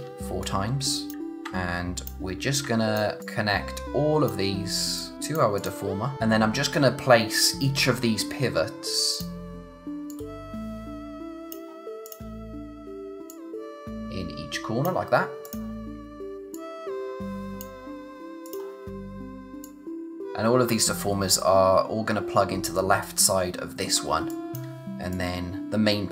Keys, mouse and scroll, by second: 0.4 click, 2.6 click, 3.2 click, 9.1 click, 20.3 scroll down 1, 20.7-22.5 scroll up 1, 23.9 scroll down 1, 24.1 space, 24.3 click, 24.6 space, 25.1 click.